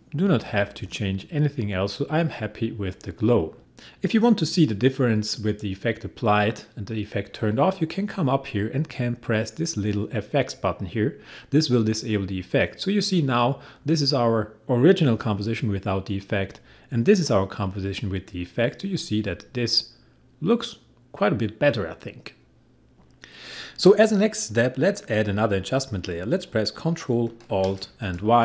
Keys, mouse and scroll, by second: 10.8 click, 16.4 click.